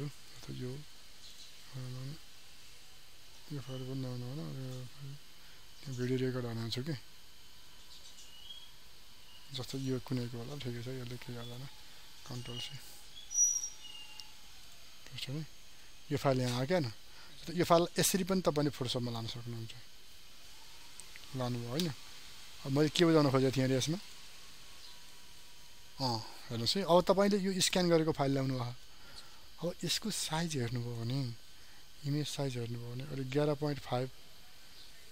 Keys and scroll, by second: 12.2 ctrl+c.